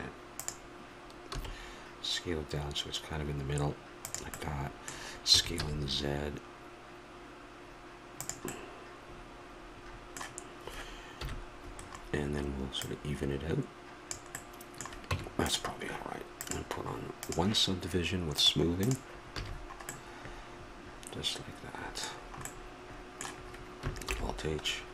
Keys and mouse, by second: 1.3 s, 4.3-7.5 middle drag, 5.3 s, 11.1 KP_1, 12.8-14.3 drag, 14.3 middle click, 15.1 Tab, 16.4-18.3 drag, 19.4 a, 20.4 middle click, 24.0 alt+h.